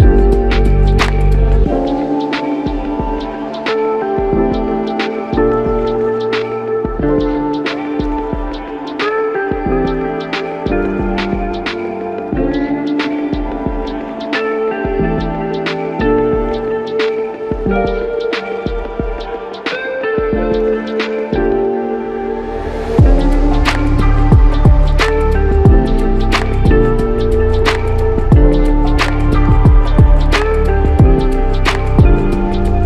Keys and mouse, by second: 2.0 double click, 8.7 double click, 13.6 double click, 24.8 double click, 25.1 ctrl+i, 32.2 double click.